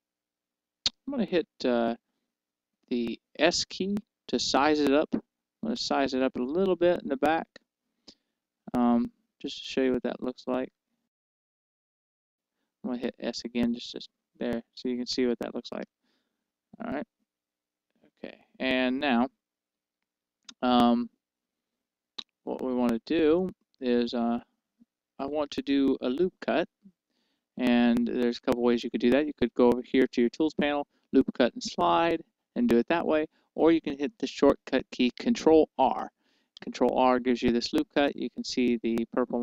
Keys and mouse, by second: 4.8 s, 8.8-12.5 drag, 10.5 z, 13.3 s, 16.1-18.3 right drag, 18.3 z, 24.1-26.0 middle drag, 36.5 ctrl+r.